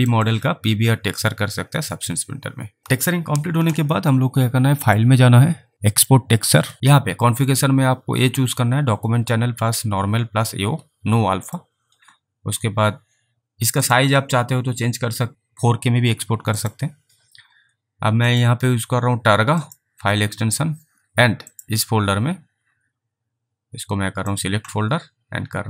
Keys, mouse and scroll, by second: 0.3 alt+click, 4.9 click, 5.9 click, 7.5 click, 11.5 click, 13.9 click, 16.6 click, 18.2 click, 19.7 click, 21.4 click, 24.3 click.